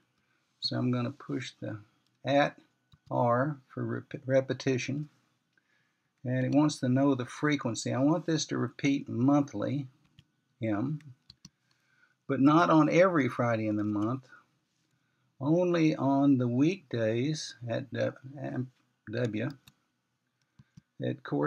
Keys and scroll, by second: 0.8 @, 3.8 typing, 11.8 m, 14.6-15.3 typing, 20.8 w.